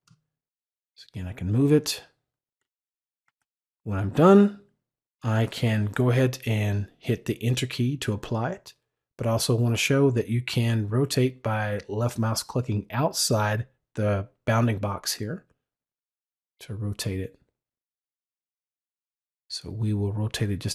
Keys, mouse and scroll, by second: 0.7 click, 15.3-20.4 drag.